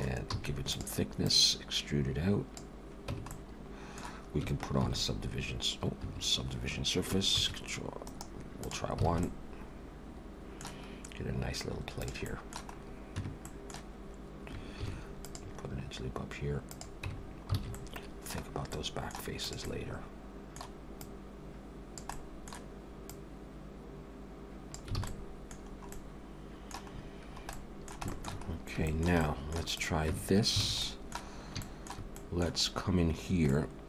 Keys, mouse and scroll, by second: 0.3 e, 1.3 click, 3.1 Tab, 3.2 middle click, 4.8 ctrl+q, 7.2 ctrl+1, 8.0 right click, 9.1 alt+a, 9.2 middle click, 11.3-12.0 scroll down 2, 12.0 click, 12.3 middle click, 12.7-13.5 scroll up 2, 13.2 Tab, 13.5 middle click, 14.0-14.5 scroll up 2, 14.8 ctrl+r, 17.1 Tab, 17.2-17.5 scroll down 3, 17.6 alt+a, 17.7 middle click, 18.4 scroll down 2, 18.7 middle click, 19.4 click, 19.6 middle click, 21.0 click, 22.1 middle click, 23.1 click, 25.0 alt+a, 25.1 middle click, 25.6-25.9 scroll down 4, 25.9 middle click, 26.9-28.0 scroll up 5, 27.5 middle click, 28.1 shift+middle click, 28.4 scroll up 1, 28.9 shift+middle click, 29.2 middle click, 29.7 click, 30.1 Tab, 30.6 alt+a, 30.8 middle click, 31.3 scroll up 2, 31.6 shift+middle click, 32.2 middle click, 32.6-33.0 scroll up 2, 33.5 middle click.